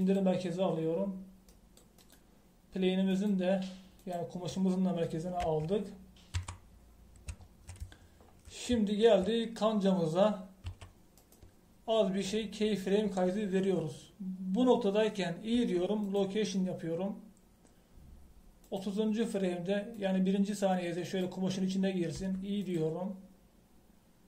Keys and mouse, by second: 4.1-6.4 middle drag, 11.6 t, 12.2 right click, 16.7 i, 19.6 click, 23.1 i.